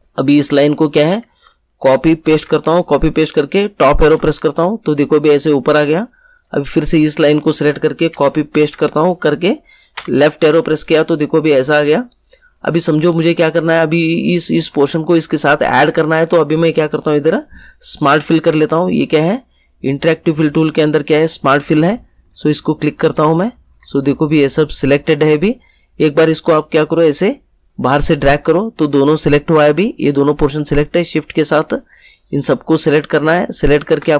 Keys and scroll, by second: 1.8 ctrl+c, 2.2 ctrl+v, 4.0 Up, 8.0 ctrl+c, 8.4 ctrl+v, 9.9 Left.